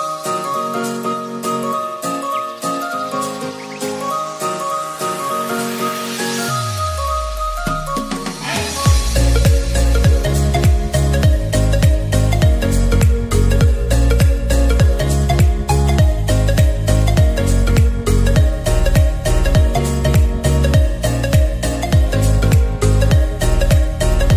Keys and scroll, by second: 4.1-4.5 typing.